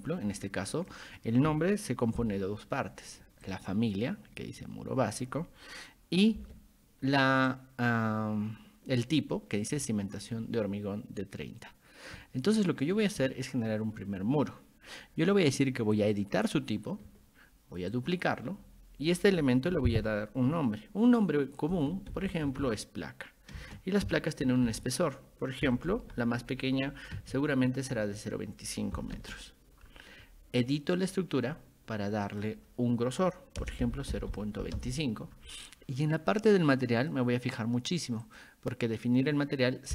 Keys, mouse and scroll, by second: 2.2 g, 3.5-5.2 ctrl+drag, 6.4 b, 7.5-9.8 ctrl+drag, 16.0 click, 17.9 click, 21.5-27.2 typing, 29.0 m, 31.0 click, 32.3 click, 36.5 click, 38.3 click.